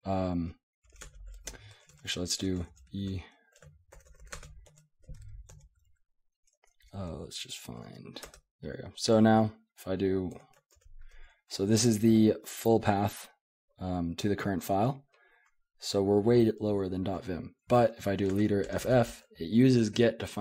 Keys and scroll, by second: 0.6-5.0 typing, 4.7 Tab, 5.5 Tab, 6.4 Tab, 6.6 Tab, 6.8 Tab, 8.2 Tab, 8.2 Return, 10.3 1, 10.7 ctrl+g, 18.3 space, 18.8 f.